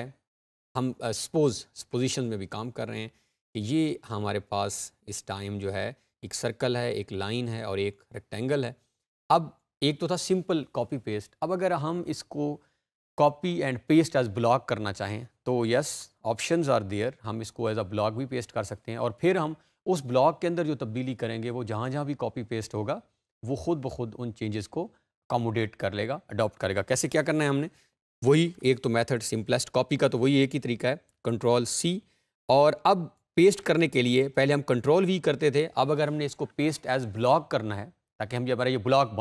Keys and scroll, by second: 31.0 ctrl+c.